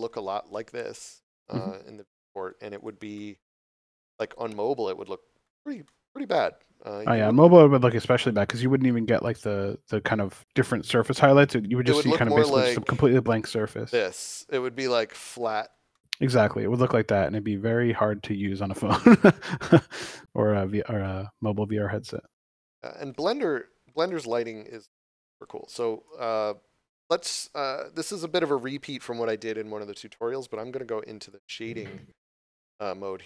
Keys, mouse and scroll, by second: 0.4 middle click, 2.6 right click, 3.0 middle click, 5.7 shift+middle click, 10.7 click, 15.8 middle click, 18.4 click, 21.1 middle click, 22.0 shift+middle click, 23.9 shift+middle click, 24.8 middle click, 31.1 click.